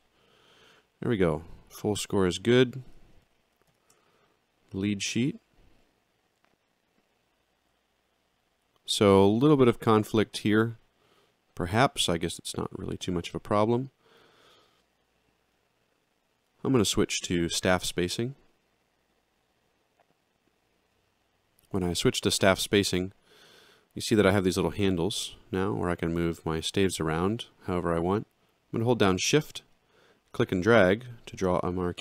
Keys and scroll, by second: 3.7 alt+shift+].